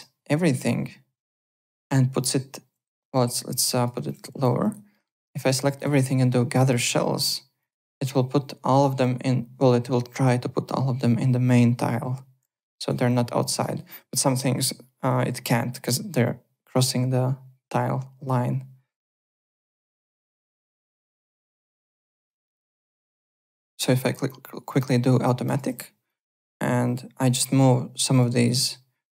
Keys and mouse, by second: 1.6 middle click, 3.0 r, 3.3 click, 3.9 w, 4.0 click, 4.1 click, 4.2 3, 4.4 click, 4.9 middle click, 7.6 click, 12.6 alt+middle click, 12.7 alt+right click, 13.6 alt+middle click, 13.7 alt+right click, 19.4 alt+middle click, 20.2 alt+Tab, 22.2 alt+Tab, 24.0 click, 24.7 click, 25.4-26.2 typing, 25.4 click, 26.0 click.